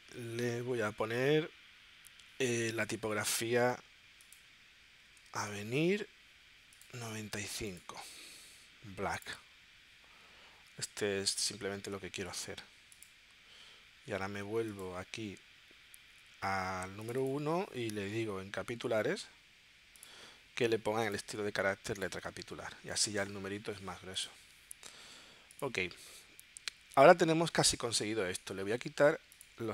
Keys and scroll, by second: 4.8-5.8 typing.